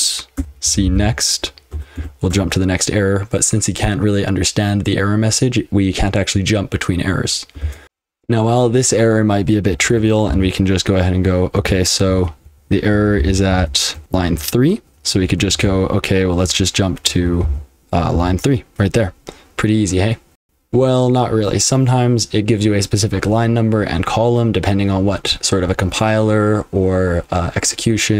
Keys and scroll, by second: 0.0-2.5 typing, 7.8 super+h, 7.8 super+l, 8.0 F12, 9.8 ctrl+w, 10.3 j, 11.7 ctrl+f, 11.9 ctrl+f, 12.0 ctrl+f, 12.4-15.5 typing, 17.2 ctrl+w, 17.4 k, 18.1 j, 20.4 F12, 20.4 F12, 20.4 super+h, 20.4 super+l.